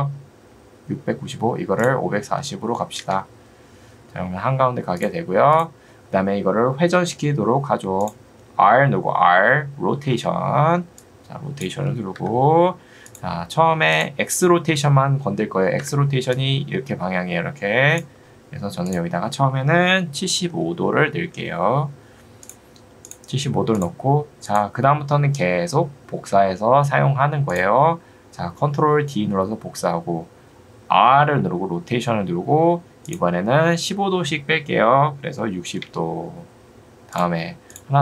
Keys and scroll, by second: 1.2 Escape, 2.0-2.9 typing, 3.0 Return, 12.2 Escape, 15.8 Escape, 20.2 7, 20.6 5, 21.4 Return, 31.2 r, 35.4 6, 35.8 Return.